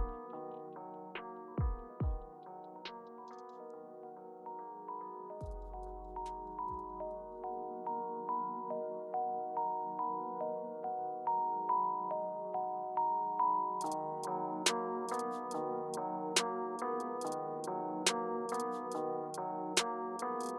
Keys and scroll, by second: 5.2 Return, 5.7 Return, 12.0 Return, 12.5 Return, 13.9 BackSpace, 15.0 Return, 18.2 Return, 19.6 BackSpace, 20.3 Return.